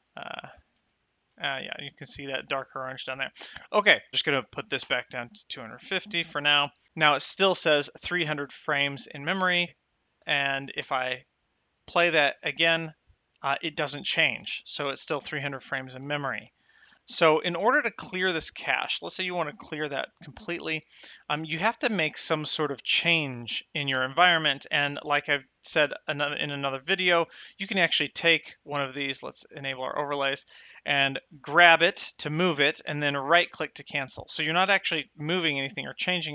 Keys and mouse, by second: 0.3 shift+click, 0.7 space, 4.1 KP_0, 11.1 space, 14.5 space, 17.0 shift+middle click, 24.4 click, 25.5 shift+middle click, 27.7 click, 29.5 click, 31.8 g, 33.7 right click.